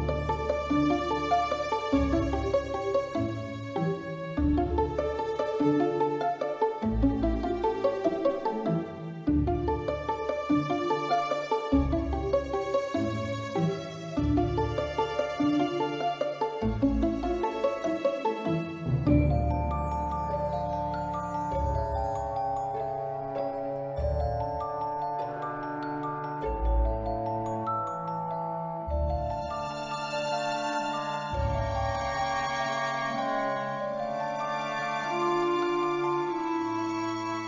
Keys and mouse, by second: 5.0 click, 5.8-6.5 drag, 7.4-7.9 drag, 9.5-11.0 drag, 11.7-13.5 drag, 12.6 0, 14.8 click, 15.9 ctrl+c, 16.5 ctrl+v, 17.6 Delete, 19.0 shift+a, 22.3-23.9 drag, 25.2 click, 25.8-26.4 drag, 30.3 click, 31.2-32.5 shift+middle drag, 32.8 Tab, 33.8 ctrl+r, 35.7 click, 36.2 Tab.